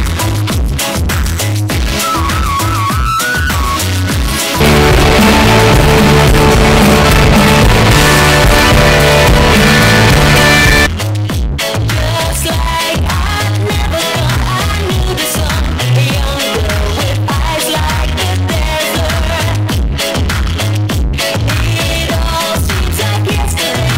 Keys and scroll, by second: 11.5 Page_Down.